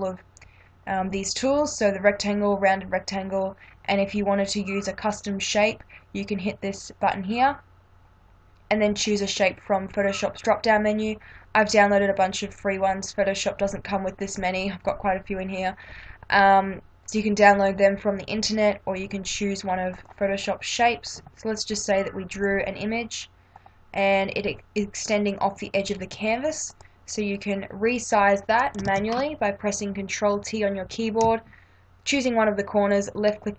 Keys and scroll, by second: 28.8 ctrl+t.